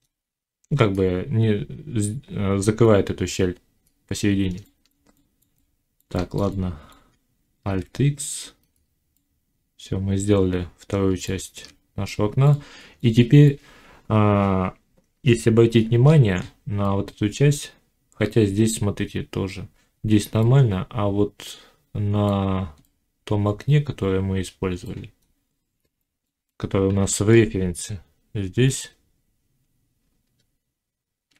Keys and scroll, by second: 7.6 alt+x, 11.2 Tab, 26.8 1, 30.1 z.